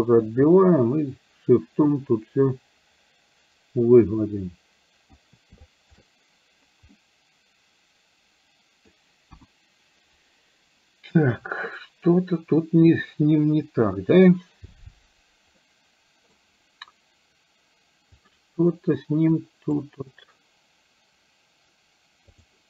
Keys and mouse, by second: 0.5-5.2 shift+drag, 5.8 shift+click, 7.0-8.9 middle drag, 9.4 KP_1, 15.7 middle click, 19.4 click, 22.4 click.